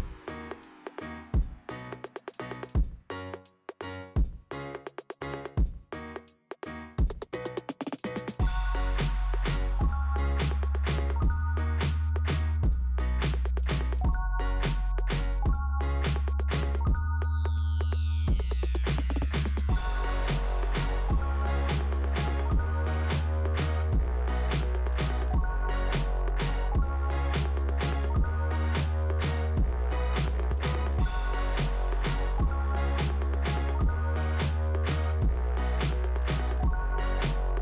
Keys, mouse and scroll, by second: 1.1 middle click, 2.5 click, 3.3 click, 10.0 scroll up 2, 12.9 click, 13.5 click, 14.5 click, 15.0 click, 15.1 double click, 16.0 double click, 16.6 click, 16.9 click, 17.8 click, 18.6 click, 19.5 click, 20.3 middle click, 26.1 click, 27.7 click, 27.8 click, 28.9 click, 30.8 click, 32.4 click, 33.4 click, 33.6 click, 35.7 click, 36.0 click.